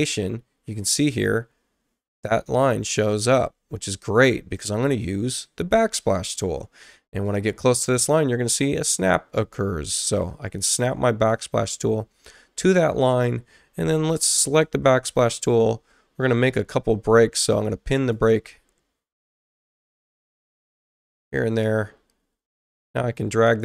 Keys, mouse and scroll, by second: 9.0-11.3 drag, 12.6 click, 16.7 ctrl+o, 17.9 click, 20.8 click, 21.6 space, 22.5 click.